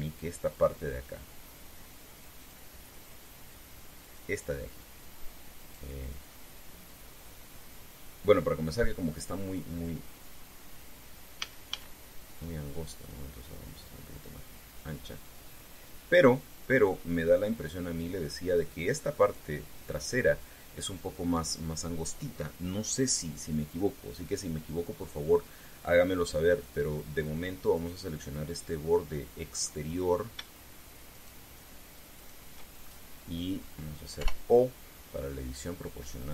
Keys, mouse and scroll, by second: 0.0 scroll up 2, 0.4 Tab, 3.1 click, 4.8 right click, 6.3 right click, 7.0-10.2 middle drag, 12.1 a, 13.8-18.9 drag, 20.0 right click, 27.4 click, 28.5 right click, 29.7 middle click, 30.7 scroll up 1, 31.9 shift+right click, 32.9 shift+right click, 33.6 shift+scroll up 2, 34.9 o.